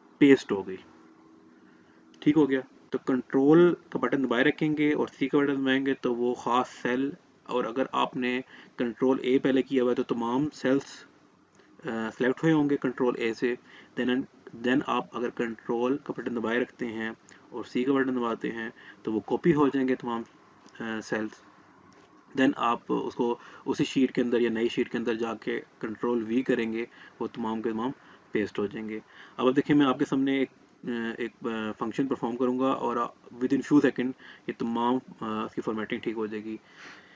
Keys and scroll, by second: 15.6 ctrl+c.